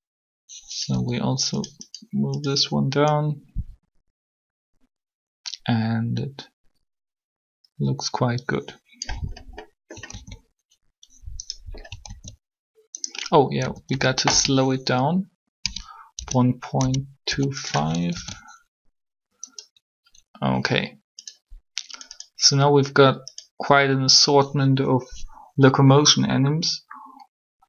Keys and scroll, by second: 0.9 r, 9.9 alt+a, 12.0 alt+a, 13.6-14.2 typing, 15.6 1, 16.1 ., 16.5 2, 18.1 alt+a, 18.1 5.